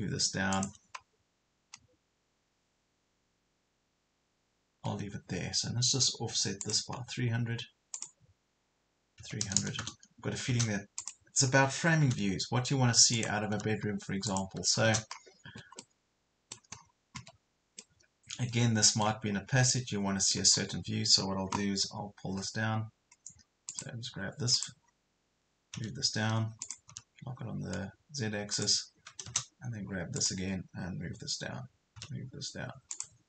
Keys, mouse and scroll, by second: 0.5 click, 4.7 Escape, 6.6 click, 9.2 KP_3, 9.5 KP_0, 11.0 click, 12.1 m, 13.1 click, 14.3 click, 15.0 scroll down 1, 15.5 Escape, 15.8 middle click, 16.7 scroll up 1, 17.2 Escape, 17.8-19.3 middle drag, 19.3 scroll up 1, 19.7 middle click, 20.6 scroll down 1, 21.2-21.5 scroll up 1, 23.7 click, 25.7 m, 26.7 click, 28.6 click, 31.9 m, 32.9-33.2 drag.